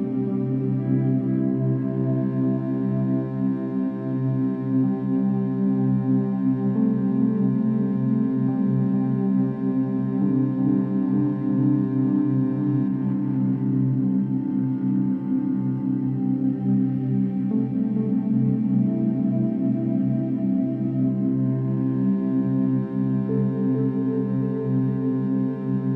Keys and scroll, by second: 16.5 ctrl+=, 16.6 ctrl+-, 18.1 ctrl+=.